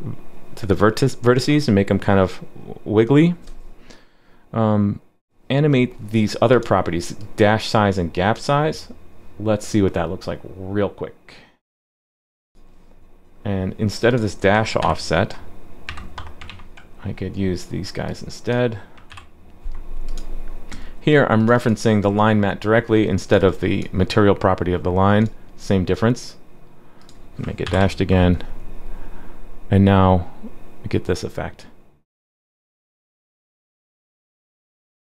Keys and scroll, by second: 12.5 super+c, 14.8 super+/, 16.5 super+v, 19.1 super+/, 27.6 super+/, 27.8 super+s.